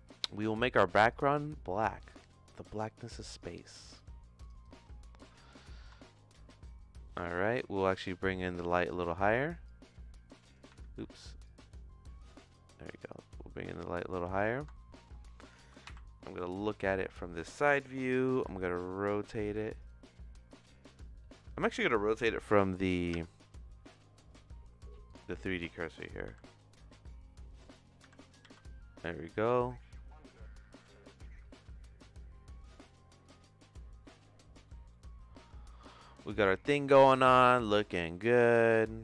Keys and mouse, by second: 0.4 click, 1.1 click, 3.4-5.0 drag, 6.0-7.0 shift+middle drag, 8.7 click, 9.6 click, 10.8 ctrl+z, 11.5-14.3 drag, 14.7 shift+middle click, 15.8 KP_1, 18.3 r, 26.2 r, 28.0 r, 34.0 middle click, 34.6 middle click, 37.6 click, 38.4 shift+middle click.